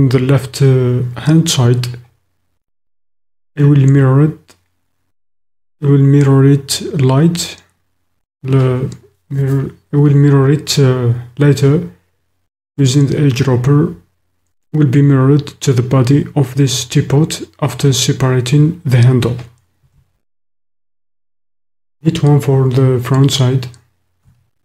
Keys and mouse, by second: 20.1 shift+KP_1, 24.2 KP_3.